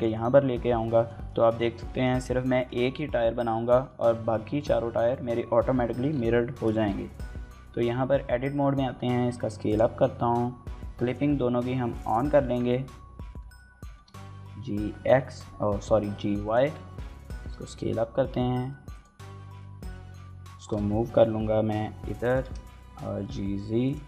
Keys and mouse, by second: 1.3 shift+middle click, 1.6 middle drag, 2.4 shift+middle click, 2.6 middle click, 3.9 KP_1, 4.7 KP_3, 6.4 shift+middle drag, 7.2 Tab, 7.5 a, 8.1 s, 9.5 right click, 9.9 Tab, 10.8 drag, 11.7 click, 12.3 Tab, 13.6 g, 13.8 x, 14.8 y, 16.2 click, 16.4 Tab, 17.0 s, 17.5 middle click, 17.8 right click, 18.1 KP_Decimal, 18.4 click, 18.5 s, 18.7 KP_1, 18.9 s, 19.7 shift+click, 20.6 x, 22.0 click, 22.1 g, 22.3 z, 23.6 click.